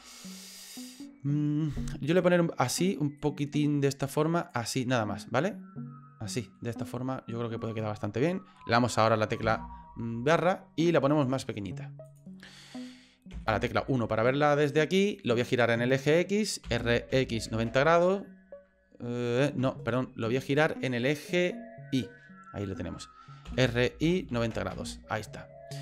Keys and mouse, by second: 0.5 middle click, 2.2 click, 3.2-4.5 drag, 4.7-6.6 middle drag, 9.4 KP_Divide, 11.0 s, 13.3 KP_1, 16.6 r, 20.3 ctrl+z, 20.9-22.0 middle drag, 23.5 r.